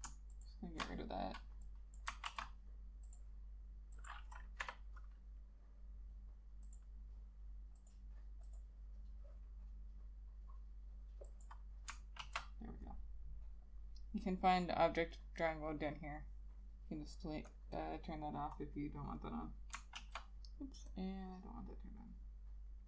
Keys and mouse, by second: 0.4 ctrl+shift+click, 2.9 ctrl+z, 4.8 Delete, 12.3 ctrl+z, 17.9 double click, 20.1 ctrl+z.